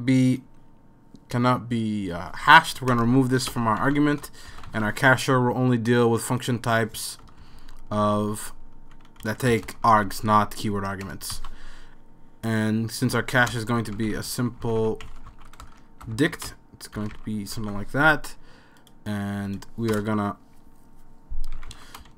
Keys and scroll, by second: 2.9 BackSpace, 3.1 BackSpace, 3.5 BackSpace, 3.8 super+s, 4.7 ), 7.3 Right, 7.4 Right, 7.6 Right, 8.0 Right, 8.2 Right, 8.3 Right, 8.4 Right, 8.6 Right, 9.2 Right, 9.5-11.1 typing, 12.6 super+s, 13.5 Return, 13.5-17.5 typing, 18.2 super+s, 19.9 Return, 21.3-22.1 typing.